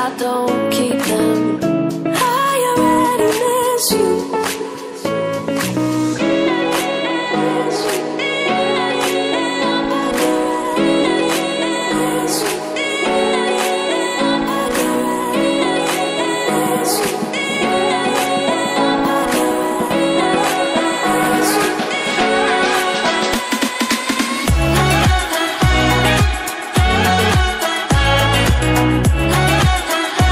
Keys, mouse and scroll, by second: 1.9 click, 2.7 click, 4.0 click, 6.0 click, 7.7 click, 10.1 click, 16.5 click, 28.1 click, 29.9 double click.